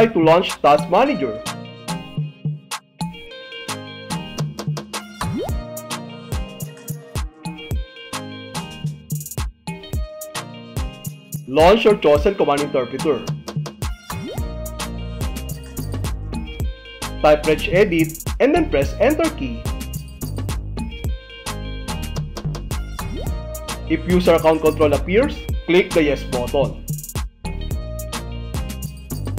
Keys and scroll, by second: 1.6 ctrl+shift+Escape, 5.6 alt+d, 7.6 alt+f, 9.5 n, 15.2 Return, 23.0 Return, 26.3 Left, 27.5 space.